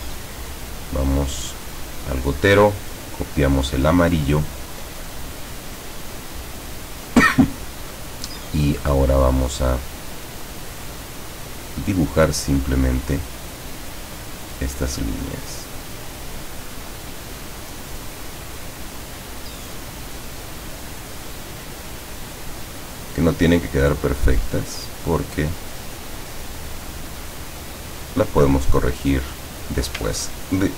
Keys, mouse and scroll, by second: 1.8 click, 2.8 click, 8.5 click, 17.0 click, 18.1 click, 21.3 click, 23.5 click, 24.6 click, 28.4 click, 28.9 click, 30.2-30.6 ctrl+scroll up 2.